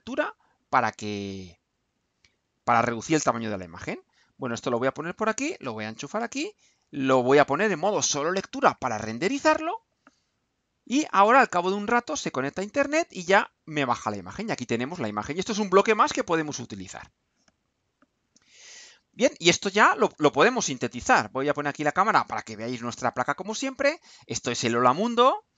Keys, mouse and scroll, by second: 3.0-4.9 drag, 5.3-6.3 drag, 6.8 click, 8.4 click, 9.5 click, 13.2-14.4 drag, 15.4-18.3 drag, 20.1 right click, 21.9 click, 24.4 right click, 25.5 click.